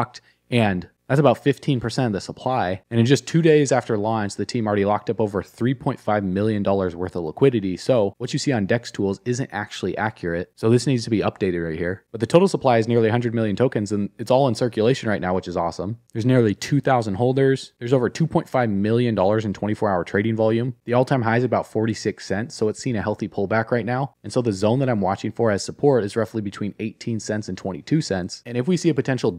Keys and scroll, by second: 8.1 alt+q.